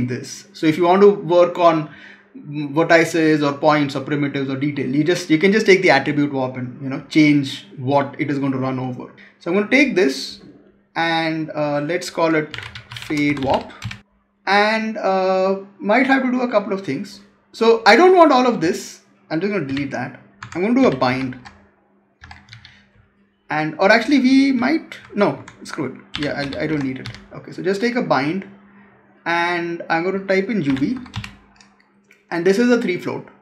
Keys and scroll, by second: 12.9 space, 19.5 Delete, 20.3 Tab, 25.2 Tab.